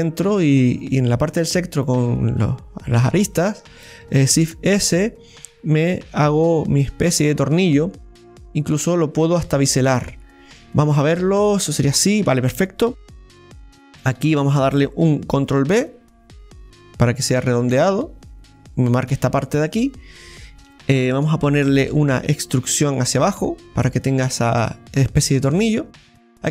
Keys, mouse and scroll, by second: 0.3-1.8 right drag, 1.8 click, 2.9 right click, 3.2 alt+shift+right click, 3.4 alt+shift+right click, 4.2 shift+s, 5.2 s, 13.5-15.5 right drag, 19.4 scroll down 1, 19.7-26.5 middle drag, 25.6-26.1 scroll down 2.